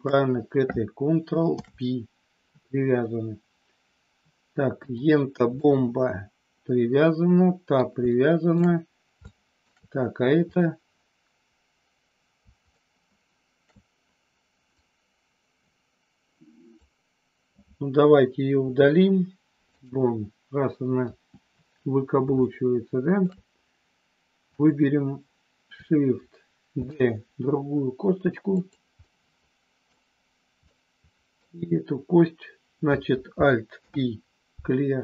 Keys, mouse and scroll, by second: 1.5 ctrl+p, 4.8 click, 5.6-7.8 middle drag, 8.1 shift+middle click, 9.2 shift+middle click, 10.5 click, 12.7-13.7 shift+middle drag, 14.7-16.8 drag, 18.5 Delete, 20.9 KP_1, 22.5 shift+middle click, 24.5 click, 26.7 shift+d, 28.6 click, 28.9-29.9 middle drag, 30.7 middle click, 33.7 alt+p.